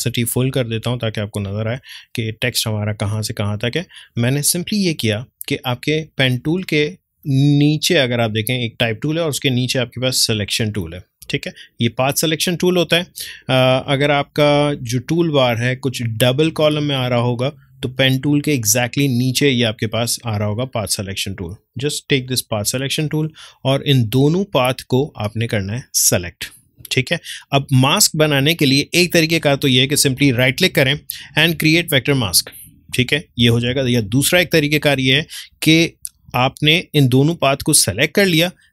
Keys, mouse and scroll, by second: 20.2-30.1 drag, 30.1 right click, 32.0 click, 33.7 ctrl+z.